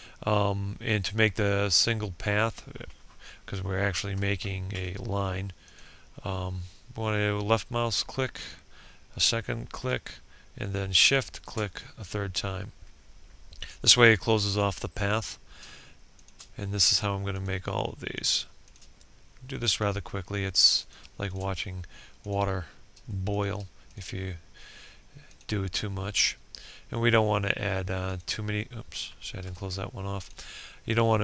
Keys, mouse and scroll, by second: 3.0 ctrl+scroll down 1, 4.9 click, 10.3 shift+click, 13.3 click, 15.4 shift+click, 16.5 click, 17.9 shift+click, 20.5 shift+click, 23.1 shift+click, 28.5 ctrl+z, 29.4 click.